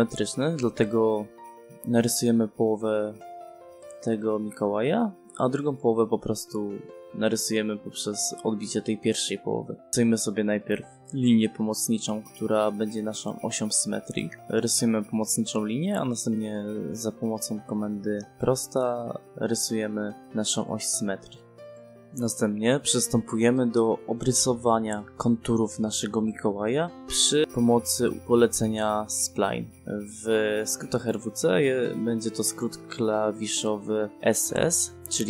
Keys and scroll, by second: 3.4 v, 3.9 space, 11.8 space, 12.8 g, 13.3 space, 14.1 i, 17.2 space, 21.2 space.